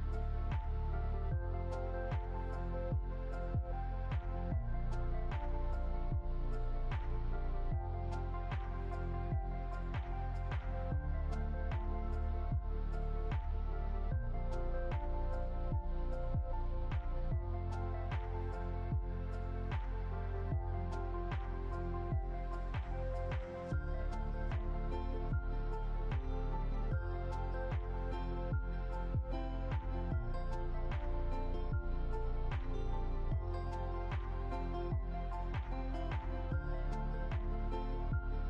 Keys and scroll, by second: 0.3 ctrl+d, 12.2 ctrl+0, 27.1 ctrl++, 31.6 ctrl+c, 31.9 ctrl+f.